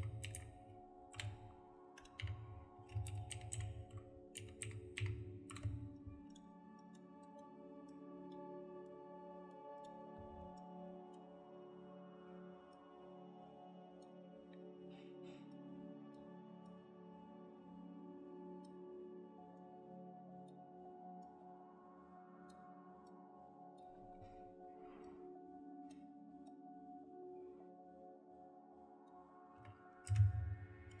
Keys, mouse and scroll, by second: 0.0-0.7 typing, 1.1 Return, 2.2 F3, 3.0-5.5 typing, 5.5 Return, 6.8 double click, 14.3 middle click, 29.6 Escape, 30.0 space.